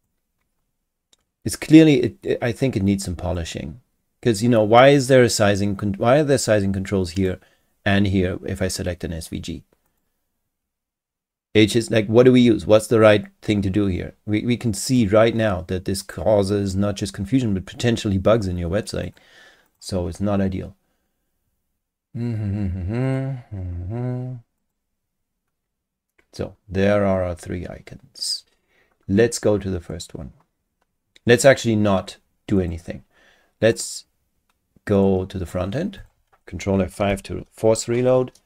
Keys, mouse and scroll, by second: 3.3 click, 4.9 click, 7.1 click, 9.9 click, 14.9 click, 16.0 click, 19.0 click, 19.7 click, 23.0 click, 24.6 click, 29.9 click, 32.6 click, 33.7 click, 35.0 click, 36.0 click, 37.0 ctrl+F5.